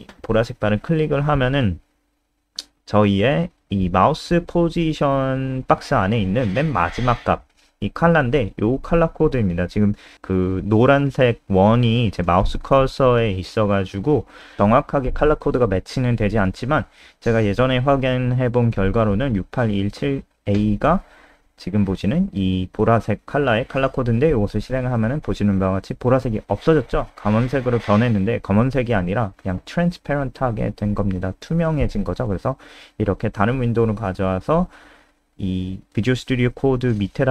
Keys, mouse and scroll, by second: 17.9 click, 18.9 click, 19.8 click, 20.4 ctrl+s, 23.4 click, 23.7 F5, 27.1 F3, 28.8 click.